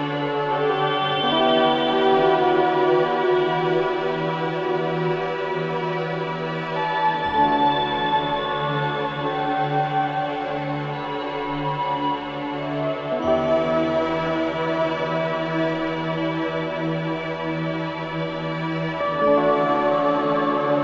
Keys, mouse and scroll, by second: 1.5-2.9 drag, 5.2 scroll up 1, 5.6-7.3 middle drag, 7.5-9.1 drag, 9.9 click, 11.4 click, 12.3-12.7 scroll up 1, 12.7 middle click, 13.1-13.9 scroll up 1, 14.2 s, 16.7 click, 17.5 click, 18.3-18.9 scroll up 2, 18.9-20.0 middle drag.